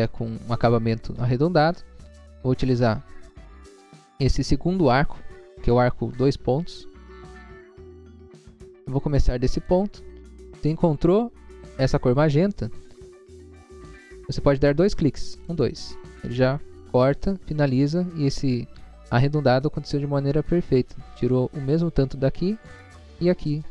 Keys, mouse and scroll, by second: 2.2 click, 2.2 scroll up 1, 6.8 click, 7.2 click, 8.0 scroll up 1, 8.6-8.9 scroll up 1, 9.6 click, 15.4 click.